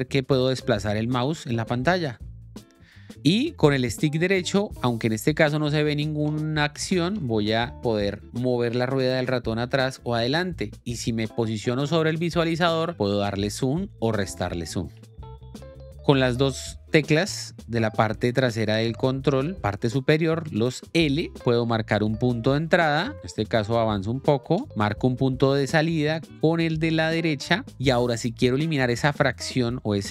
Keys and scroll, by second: 22.4 i, 22.9 l, 24.4 k, 24.8 o.